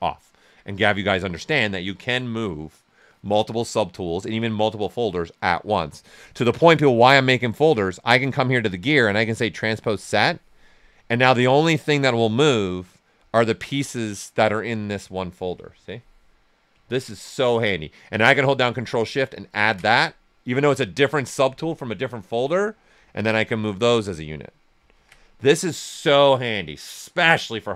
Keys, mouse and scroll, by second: 8.4 click, 8.4 typing, 11.0-12.5 ctrl+right drag, 12.5-16.8 drag, 16.8 ctrl+z, 19.2 ctrl+shift+click, 22.9-24.9 drag, 24.9 ctrl+z.